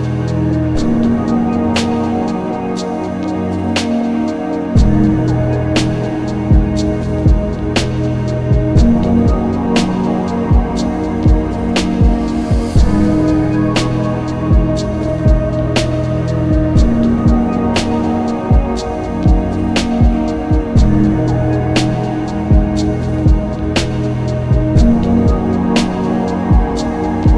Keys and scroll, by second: 5.9 b, 6.1 s, 6.2 t, 8.3 ctrl+z, 16.3 s, 16.9 shift+s, 24.2 b, 24.5 d, 24.6 s.